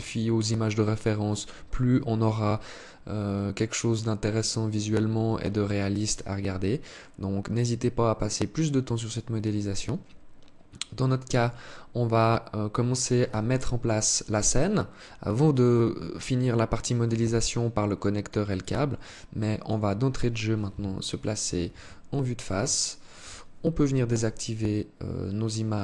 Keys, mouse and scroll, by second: 12.6 Escape, 13.2-14.3 scroll down 8, 15.5 alt+click, 16.5 alt+click, 18.0 alt+click, 18.5 alt+click, 19.6 right click, 20.8 KP_1, 22.1 alt+shift+click, 23.2 n.